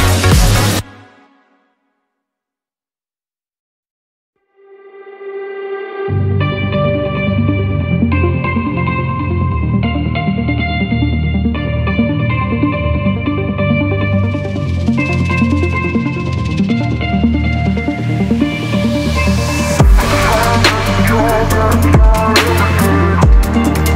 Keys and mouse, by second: 0.3 Tab, 1.5 alt+click, 2.7 ctrl+b, 6.2 alt+z, 6.8 Tab, 7.2 drag, 8.0 alt+z, 9.1 click, 9.8 click, 10.6 shift+d, 11.1 click, 12.2 click, 13.2 ctrl+s, 13.5 a, 13.7 a, 14.1 click, 14.6 click, 15.3 q, 16.5 w, 17.6 ctrl+s, 17.9 a, 18.0 a, 18.8 shift+drag, 19.2-20.0 drag, 20.5 click, 21.0 Tab, 21.3-21.9 drag, 22.2 Tab, 22.5-23.4 drag.